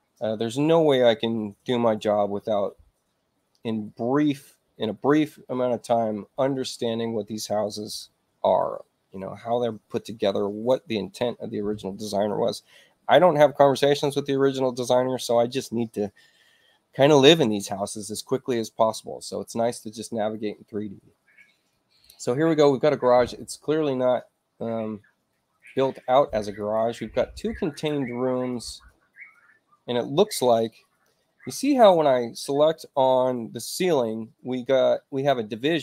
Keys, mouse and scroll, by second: 25.5 click, 26.5 click, 27.6 click, 28.5 click, 31.6 click.